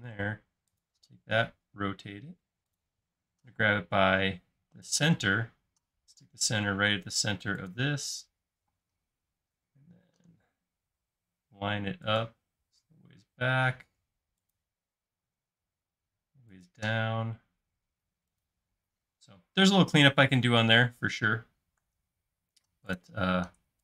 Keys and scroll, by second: 3.6 m, 8.6 m, 18.8 space.